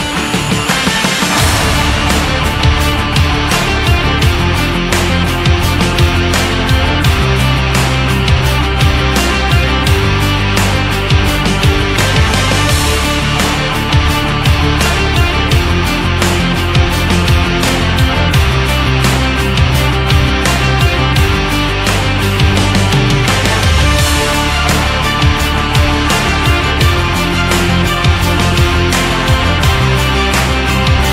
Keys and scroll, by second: 30.9 BackSpace.